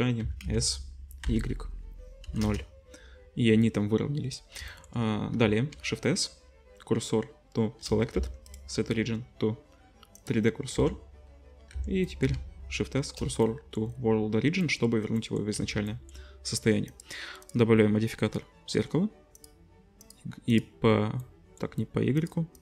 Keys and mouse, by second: 0.2 s, 5.7 shift+s, 8.1 Tab, 10.7 Tab, 11.7 Tab, 12.3 shift+s, 15.5 z, 17.0-17.4 drag, 20.1-20.5 drag, 20.6-22.2 drag.